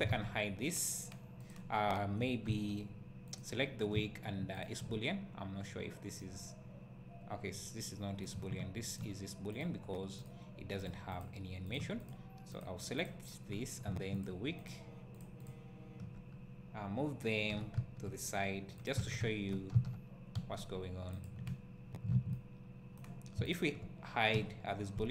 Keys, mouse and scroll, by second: 0.1 alt+a, 1.5 click, 2.6 z, 3.4 click, 4.6 shift+click, 5.1 scroll down 1, 6.2-9.0 right drag, 9.0 shift+click, 12.0 click, 13.5 scroll up 1, 14.2 shift+click, 16.2 scroll down 1, 17.5 g, 18.8 click, 19.0 alt+a, 19.2 `, 19.9 z, 21.2 click, 22.3-23.5 right drag, 23.5 shift+click, 24.3 h.